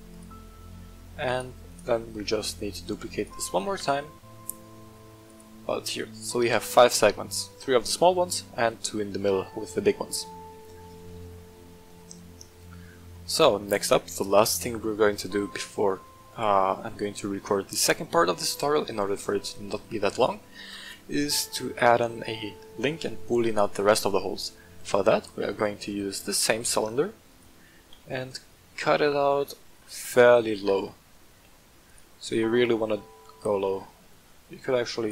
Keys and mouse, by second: 0.1 click, 1.2 right click, 1.6 right click, 2.3 shift+middle drag, 2.8 shift+d, 3.1 right click, 3.5 g, 3.7 z, 5.2 click, 11.0-11.8 shift+middle drag, 13.1-13.5 middle drag, 21.8-22.4 middle drag, 23.8 right click, 24.4-24.9 middle drag, 26.2 g, 26.4 z, 27.2 click, 27.9 KP_1, 29.0-29.3 shift+middle drag, 30.0 shift+middle drag, 30.5 g, 30.7 z, 31.8 click, 33.0-33.4 shift+middle drag, 35.0 shift+click.